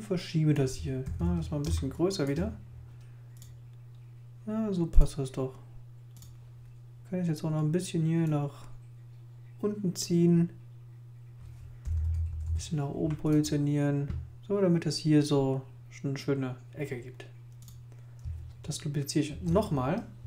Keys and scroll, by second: 1.0 super++, 1.6 super+space, 11.8 Up, 12.1 Right, 19.3 super+j.